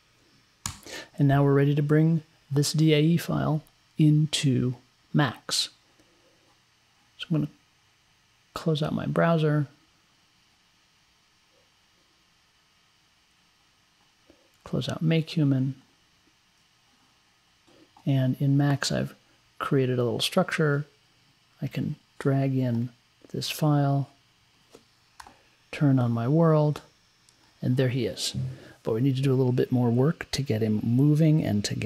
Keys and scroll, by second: 0.7 Return.